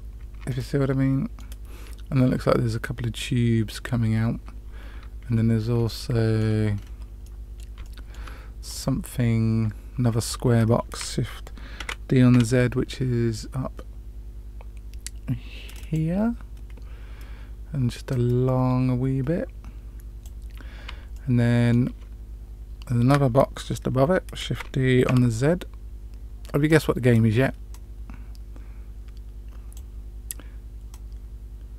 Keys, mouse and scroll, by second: 0.4-1.4 middle drag, 5.8-6.4 shift+middle drag, 6.7 scroll down 2, 7.1-7.6 middle drag, 7.7-8.1 shift+middle drag, 8.6 click, 11.7 shift+d, 18.0-20.2 drag, 21.0-21.7 shift+middle drag, 24.4 shift+d, 27.6-29.7 drag, 30.8-31.7 drag.